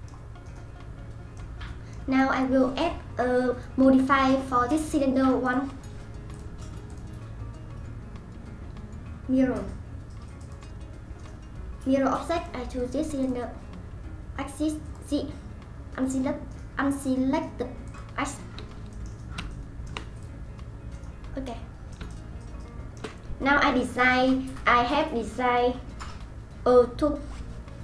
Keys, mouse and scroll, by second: 0.2 scroll down 1, 0.4-1.4 scroll up 4, 0.8-4.9 middle drag, 5.4 click, 6.3 click, 6.9-10.5 drag, 12.4 click, 14.8 click, 17.8 click, 18.9-20.1 middle drag, 20.1 click, 21.4-23.1 middle drag, 23.1-23.4 scroll down 1, 23.4-27.1 scroll up 3.